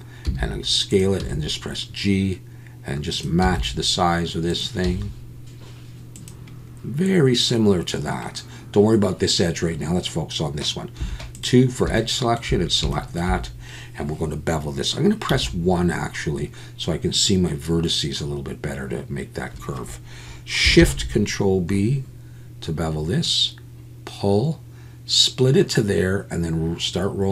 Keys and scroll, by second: 0.2 s, 1.2 g, 3.4 s, 4.8 g, 11.0 2, 20.8 ctrl+shift+b.